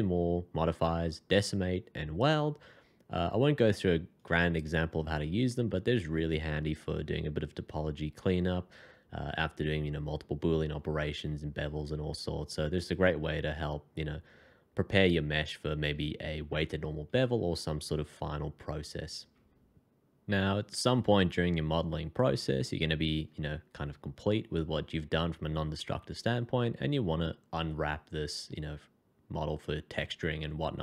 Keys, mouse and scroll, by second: 4.5 double click, 5.5 scroll up 1.